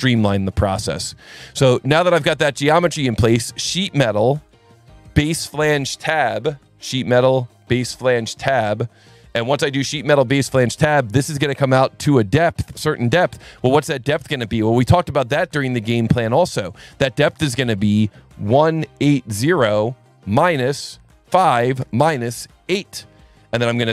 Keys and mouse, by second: 3.5 click, 4.0 click, 4.5 click, 7.7 click, 9.2 click, 12.1 click, 16.1 click, 16.7 click, 17.4 click, 18.6 KP_1, 19.0 KP_8, 19.4 KP_0, 20.4 KP_Subtract, 21.3 KP_5, 21.8 KP_Subtract, 22.7 KP_8.